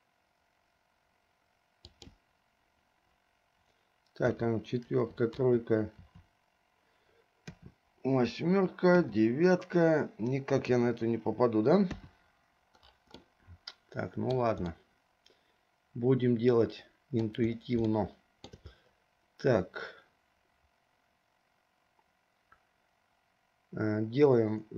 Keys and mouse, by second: 4.4 KP_4, 5.1 KP_5, 5.6 KP_6, 6.2 KP_7, 7.7 KP_8, 9.1 KP_9, 10.8 KP_0, 12.1 KP_2, 13.5-14.6 middle drag, 15.1-17.5 middle drag, 18.2 shift+middle click.